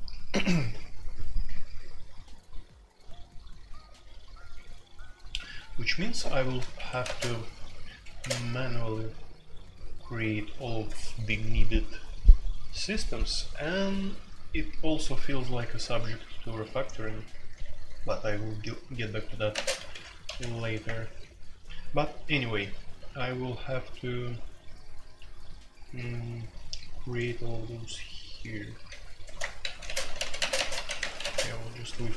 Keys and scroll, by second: 6.7 Escape, 7.0 space, 7.1 Tab, 8.1 space, 8.2 Tab, 17.1-20.8 typing, 22.0-23.4 typing, 28.7-31.2 typing.